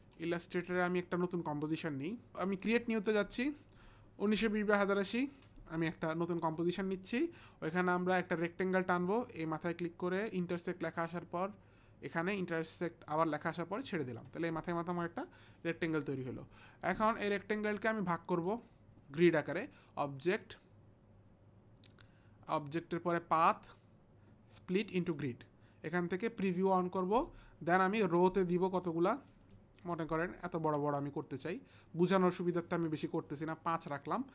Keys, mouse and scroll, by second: 0.0 click, 1.8 click, 2.3 click, 2.5 click, 5.8 click, 8.1 click, 10.1 click, 26.3 click, 29.1 click, 29.3 click, 29.8 click, 30.9 click.